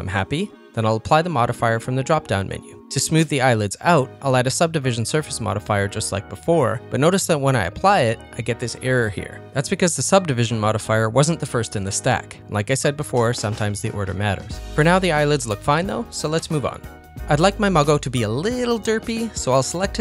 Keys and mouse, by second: 1.8 click, 3.1-4.9 drag, 6.0 click, 6.7 click, 7.8 click, 8.2 middle click, 9.4 ctrl+middle click, 9.7-11.1 middle drag, 11.3 ctrl+middle click, 11.8-13.9 middle drag, 14.7 ctrl+s, 15.7 shift+middle click, 16.0-17.2 middle drag, 17.4 shift+middle click, 17.6 ctrl+middle click, 17.8 middle click, 18.3 shift+middle click, 18.6 middle click.